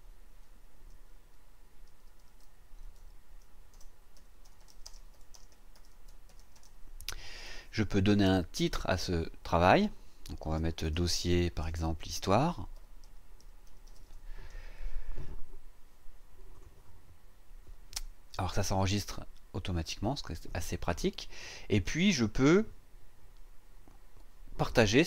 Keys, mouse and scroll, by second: 0.6-2.2 typing, 3.5-7.1 typing, 8.6 click, 10.3-14.5 typing, 16.5 click.